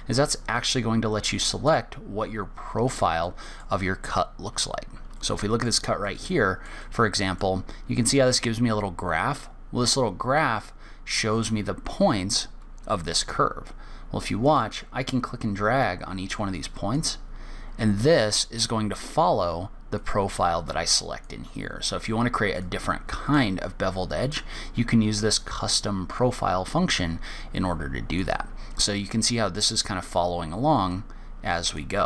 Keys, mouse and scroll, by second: 0.5 click, 3.6 middle click, 4.2-5.1 scroll up 2, 5.1 scroll down 1, 5.5 shift+middle click, 6.4 middle click, 7.1 middle click, 15.1 click, 20.3 click, 23.0 click, 26.0 click, 27.2 click, 31.3 click.